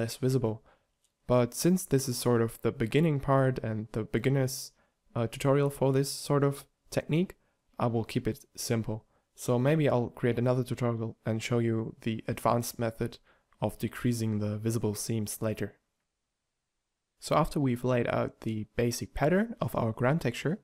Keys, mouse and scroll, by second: 0.7 shift+right click, 0.8 shift+d, 2.4 shift+d, 3.3 g, 4.8 shift+d, 6.2 g, 7.3 a, 8.1 z, 11.9 x, 12.6 x, 16.0 a, 16.2 b, 17.6 ctrl+a.